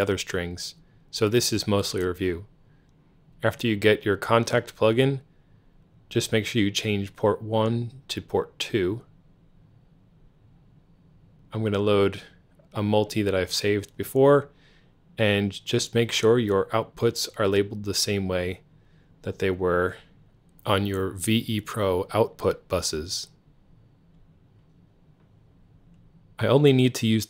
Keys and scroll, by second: 15.3 Tab, 16.3 Tab, 17.3 Right, 17.9 Right, 20.9 F3.